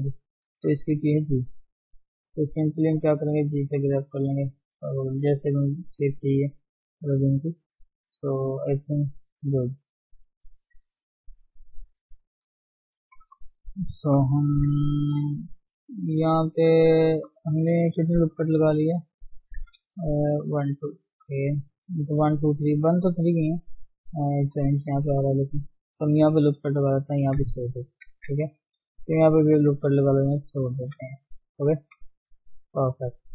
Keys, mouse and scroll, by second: 0.8 g, 1.0 f, 1.8 click, 2.7 scroll up 2, 3.0 shift+middle click, 3.5 click, 4.3-4.6 scroll down 3, 4.6 shift+middle click, 4.8 shift+scroll up 1, 5.1 click, 5.9 scroll down 4, 6.2-6.7 scroll up 5, 6.7 click, 7.0 scroll down 4, 7.3-8.7 shift+middle drag, 8.7-10.5 scroll down 4, 10.5-13.3 scroll down 1, 13.3-14.0 scroll up 1, 14.0 shift+middle click, 14.3 scroll up 2, 14.5 Tab, 14.7-15.0 scroll down 5, 15.0 shift+middle click, 15.3 scroll up 1, 15.4 middle click, 16.1 ctrl+Tab, 16.3-17.6 middle drag, 17.6-18.1 scroll up 1, 18.1 KP_1, 18.3-19.0 scroll up 1, 19.2 scroll up 7, 19.4 Tab, 19.7 scroll down 4, 19.9 shift+middle click, 20.2 scroll up 1, 20.8-23.2 scroll up 3, 21.0 shift+middle click, 23.2-23.8 scroll down 2, 26.2 ctrl+r, 27.2 Tab, 27.5-27.8 scroll down 4, 27.8 shift+middle click, 28.1-28.7 scroll up 1, 28.7 shift+middle click, 29.5 ctrl+r, 30.9 scroll down 2, 31.1 shift+middle click, 31.6 Tab, 32.0 shift+middle click, 32.3 scroll up 1, 32.7-33.3 scroll down 2.